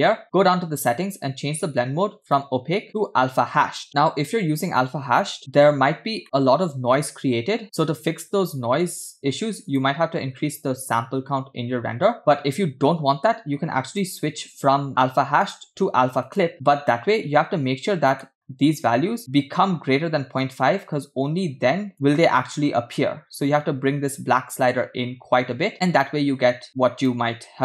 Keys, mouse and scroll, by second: 0.2 scroll down 1, 2.2-3.8 drag, 5.4 scroll up 2, 5.9 scroll up 2, 6.2 shift+middle drag, 6.9-7.4 scroll up 1, 9.7 click, 10.6-11.2 scroll up 1, 12.2-12.6 scroll down 3, 13.9 click, 15.4-16.5 drag, 18.2 middle click, 20.4-27.2 drag.